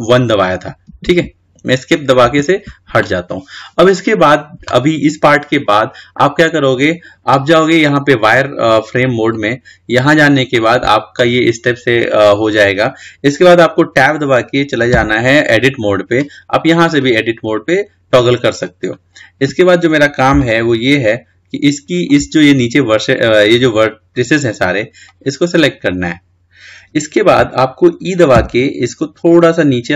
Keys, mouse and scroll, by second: 11.3 click, 15.2 Tab, 17.1 click, 19.4 scroll up 3, 20.6-23.4 shift+middle drag, 23.4 click, 25.3 click, 26.1 ctrl+z.